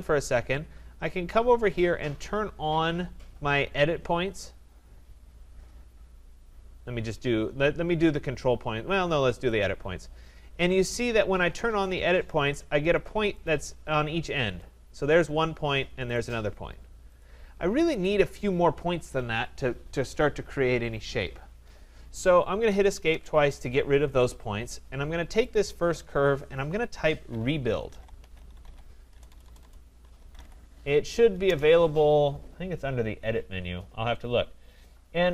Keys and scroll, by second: 22.6 Escape, 29.1 BackSpace, 31.4 Return.